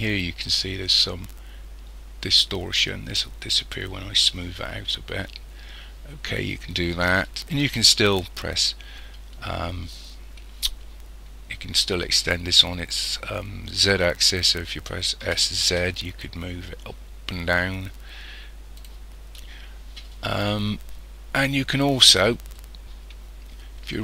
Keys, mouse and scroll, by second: 4.3-5.1 scroll down 3, 15.3 s, 22.5 middle click.